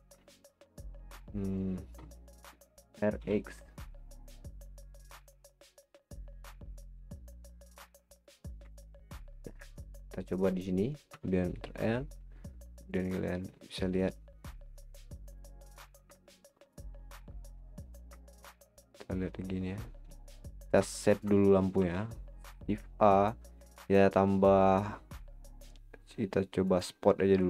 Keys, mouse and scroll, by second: 0.2-2.7 shift+middle drag, 2.7 r, 8.0 r, 8.4 scroll down 4, 8.7-11.1 middle drag, 11.1 KP_0, 13.0 click, 13.9 click, 15.2 click, 15.8-16.2 scroll up 4, 16.3-17.0 shift+middle drag, 17.0-17.4 scroll down 4, 18.3 shift+middle drag, 18.6 scroll up 1, 19.2 scroll up 3, 20.0 z, 20.5-20.9 scroll down 5, 20.9-21.3 middle drag, 21.4 scroll down 3, 21.7 shift+a.